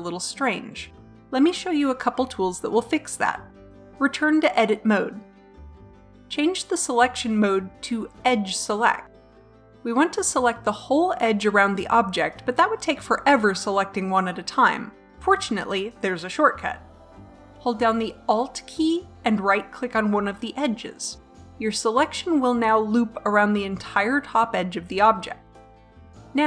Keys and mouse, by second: 4.2 Tab, 8.6-9.7 drag, 9.7 middle click, 10.1 click, 11.6-25.9 drag.